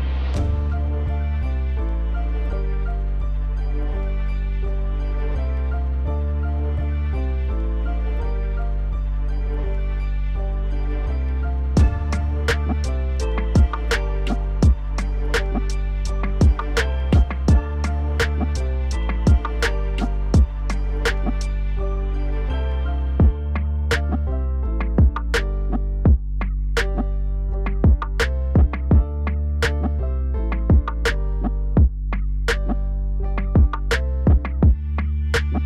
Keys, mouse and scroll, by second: 0.9 3, 1.3 click, 2.2 shift+click, 2.5 scroll down 1, 2.5 middle click, 3.2 shift+click, 4.3 middle click, 4.9 shift+click, 5.6 shift+click, 6.1 shift+click, 6.3 shift+click, 6.5 middle click, 7.0 shift+click, 7.2 shift+click, 7.5 shift+click, 7.7 shift+click, 8.0 shift+click, 8.5 shift+click, 8.8 shift+click, 9.2 scroll down 1, 9.3 middle click, 9.7 KP_1, 10.6 shift+d, 11.8 p, 12.6 Tab, 12.8 click, 13.3 KP_1, 13.6 KP_3, 14.9 KP_7, 15.6 r, 18.7 click, 19.2-19.6 middle drag, 19.6 click, 20.1 click, 21.1 KP_Divide, 21.8 KP_Divide, 22.6 Tab, 22.8 scroll down 1, 23.1 middle click, 23.6 ctrl+z, 23.9 ctrl+z, 25.0 KP_Divide, 25.5 ctrl+z, 25.5 ctrl+z, 25.7 ctrl+z, 25.9 ctrl+z, 26.7 ctrl+z, 26.9 ctrl+z, 27.4 KP_Divide, 28.3 ctrl+z, 28.5 ctrl+z, 28.6 ctrl+z, 28.7 ctrl+z, 29.1 middle click, 29.5-30.0 scroll up 2, 30.0 shift+click, 30.5 middle click, 31.3 shift+click, 32.1 shift+click, 32.7 KP_1, 33.2 scroll down 1, 33.4 middle click, 34.0 shift+d, 34.7 p, 35.3 Tab.